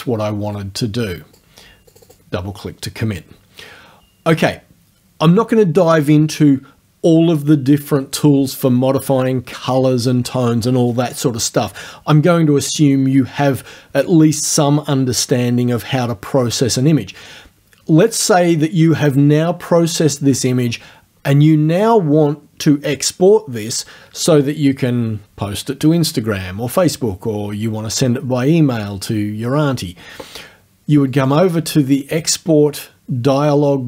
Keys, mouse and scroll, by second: 0.6 click, 1.9 click, 31.1 click.